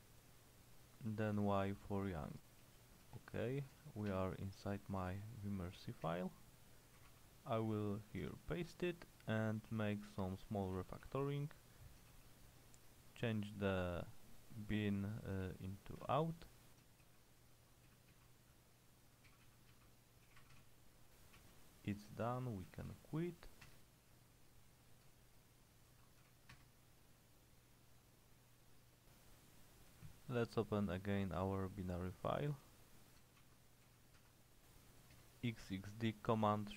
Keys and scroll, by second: 1.8-7.2 typing, 7.1 Escape, 8.4 shift+v, 9.0 Escape, 9.8-12.2 typing, 15.4-23.4 typing, 23.8 Return, 26.0-26.3 typing, 26.6 Return, 29.8-33.9 typing, 34.3 Tab, 35.2 Return.